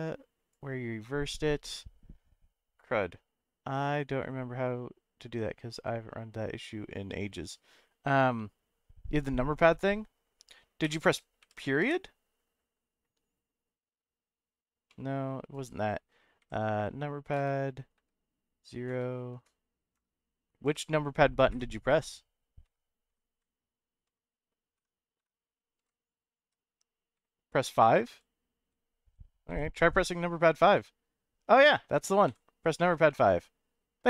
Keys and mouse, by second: 9.6 middle click, 10.8 /, 11.4 /, 11.8 ., 16.4 KP_Decimal, 17.9 KP_0, 19.9 KP_Add, 20.6 KP_Add, 21.5 KP_Subtract, 24.0 KP_Divide, 25.8-29.5 typing, 30.7 middle click, 33.1 middle click.